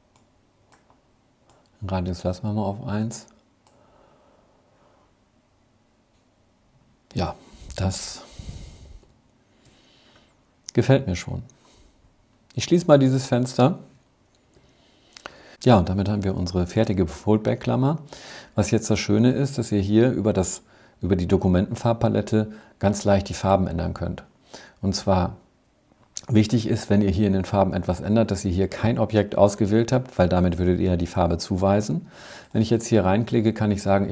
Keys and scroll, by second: 7.7 super+-, 13.5 super+-, 14.5 super+-.